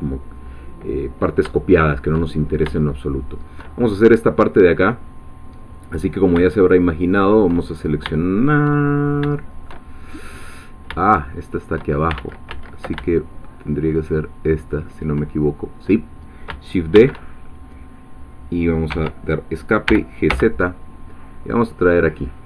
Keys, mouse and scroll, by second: 1.7 shift+middle click, 2.3-2.7 shift+scroll up 1, 2.8 shift+middle click, 3.7 shift+scroll down 1, 5.8 click, 7.0 shift+click, 7.7-8.0 shift+scroll up 1, 8.2 shift+middle click, 8.9-9.2 shift+scroll up 3, 9.4 shift+middle click, 10.0 shift+scroll up 2, 11.1 shift+click, 12.2 ctrl+shift+z, 14.1 shift+click, 16.2 scroll down 2, 16.9 shift+d, 18.9 Escape, 19.9 g, 20.3 z.